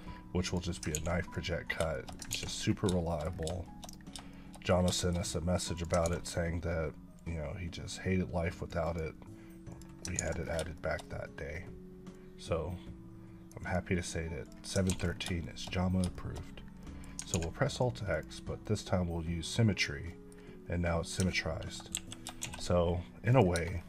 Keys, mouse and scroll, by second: 1.9 shift+middle click, 2.7 scroll down 3, 3.0 shift+middle click, 3.4 scroll down 1, 3.6 shift+middle click, 3.9 scroll up 1, 4.3 shift+middle click, 5.0 shift+middle click, 5.1 scroll up 1, 5.7 click, 6.0 ctrl+x, 6.2-6.5 scroll down 3, 6.7-7.1 scroll up 2, 7.2-8.7 drag, 8.8 double click, 9.7 click, 10.2 ctrl+x, 10.4 scroll down 3, 10.7 shift+middle click, 11.0-12.1 scroll up 4, 12.1-13.6 drag, 13.6 double click, 14.5 click, 15.0 scroll down 2, 15.4 shift+middle click, 16.1 shift+double middle click, 16.5 scroll down 2, 16.8 middle click, 17.3 alt+x, 18.1 click, 20.0 scroll up 1, 20.1 middle click, 21.1 scroll down 1, 21.1 Tab, 21.9 KP_1, 22.4 shift+a, 23.3 click, 23.5 Tab, 23.7 scroll up 3.